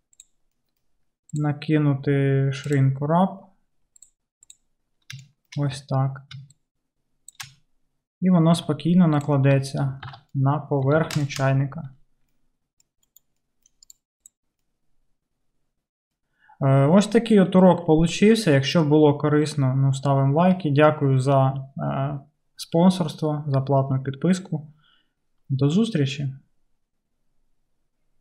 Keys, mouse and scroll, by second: 1.5-5.2 drag, 4.2-6.6 middle drag, 6.6-14.0 shift+drag, 8.6 q, 10.1 alt+z, 11.1 alt+z, 13.1 KP_Decimal, 14.0-28.2 middle drag.